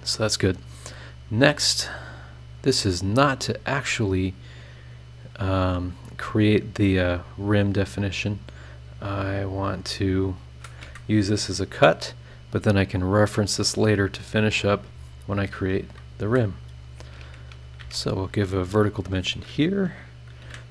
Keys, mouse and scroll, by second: 1.3 click, 2.4 click, 2.7 scroll down 1, 4.8 click, 6.4 click, 8.4 click, 10.0 click, 10.8 Escape, 12.7 click, 14.3 click, 15.6 click, 16.2 Escape, 17.8 shift+v, 18.6 click, 19.0 click, 20.4 KP_2, 20.5 KP_0.